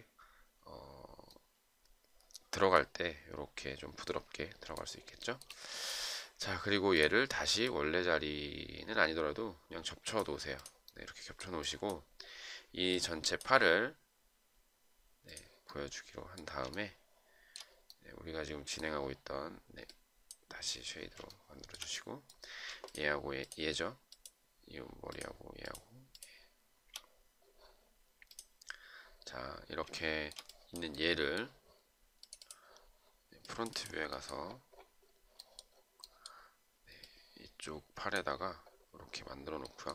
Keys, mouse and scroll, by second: 5.6 shift+right click, 17.1 shift+right click, 21.6 shift+right click, 23.2 shift+click, 23.7 shift+click, 24.5 shift+click, 25.4 shift+click, 26.0 shift+click, 26.4 shift+click, 26.6 shift+double click, 30.3 shift+right click.